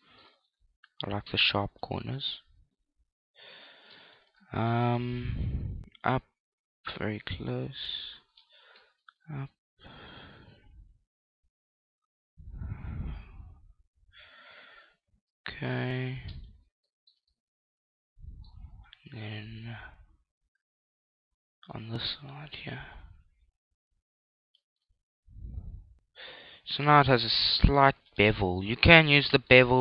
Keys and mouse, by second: 0.3 middle click, 0.9 ctrl+r, 4.1 click, 4.7-6.5 middle drag, 5.3 ctrl+r, 8.5 click, 8.9 ctrl+r, 16.4 click, 17.1-19.1 middle drag, 19.1 ctrl+e, 20.2-23.0 middle drag, 23.0 ctrl+r, 28.2 click, 28.7-29.8 middle drag.